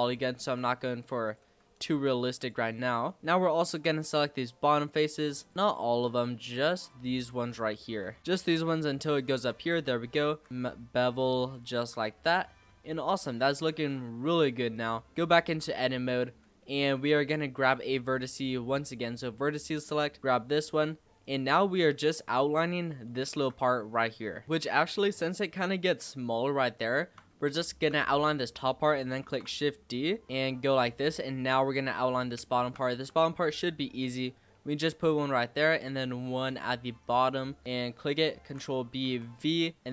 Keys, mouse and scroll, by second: 0.1-0.4 middle drag, 0.4 Tab, 1.2 click, 1.7 shift+click, 2.3 shift+click, 2.7 shift+click, 3.4 shift+click, 3.9 shift+click, 4.9 shift+click, 5.3 shift+click, 5.6 shift+click, 6.0 shift+click, 6.4 shift+click, 6.8 shift+click, 7.1 shift+click, 7.4 shift+click, 8.0 scroll down 4, 8.4 shift+click, 8.7 shift+click, 9.1 shift+click, 9.7 middle click, 10.2 ctrl+b, 11.8 Tab, 12.2 click, 12.4 scroll down 2, 12.6-14.7 middle drag, 14.7 click, 15.2 scroll up 3, 15.4 Tab, 16.5 z, 17.6 click, 18.8 click, 19.9 scroll up 2, 20.2 shift+middle click, 20.6 shift+d, 21.9 g, 22.5-22.9 scroll down 5, 23.0-24.4 shift+middle drag, 24.4 click, 25.3-25.7 scroll down 2, 25.7-26.5 scroll up 2, 26.5-27.4 scroll up 2, 27.4-29.2 shift+middle drag, 29.2 shift+d, 30.9-31.3 scroll up 3, 31.3 shift+middle click, 31.5-32.3 shift+scroll down 5, 32.3 shift+middle click, 32.9 e, 35.1 e, 37.6 click, 38.4 ctrl+b.